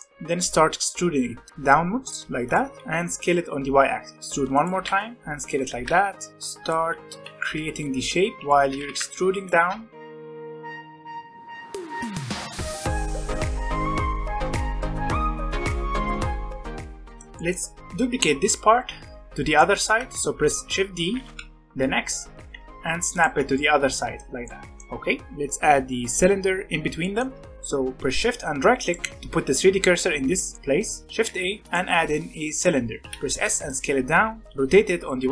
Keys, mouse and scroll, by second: 0.1-1.5 scroll up 1, 1.5 e, 2.8 s, 4.1 e, 4.7 s, 5.6 e, 6.8 s, 8.3-16.2 typing, 10.6 middle click, 13.3-14.1 scroll down 5, 13.5 middle click, 13.7 middle click, 13.8 middle click, 14.0 middle click, 14.0 alt+a, 14.1 middle click, 14.2 Tab, 14.3 scroll up 2, 14.5 middle click, 15.2 scroll up 1, 15.6 ctrl+z, 15.8 middle click, 16.5 middle click, 16.6 Tab, 16.7 middle click, 16.8 click, 16.9-21.1 shift+middle drag, 21.1 shift+d, 23.5-28.8 middle drag, 28.8 shift+right click, 30.5 middle click, 31.2 shift+a, 33.0 s, 33.8 scroll up 3, 34.0 s, 34.5 r.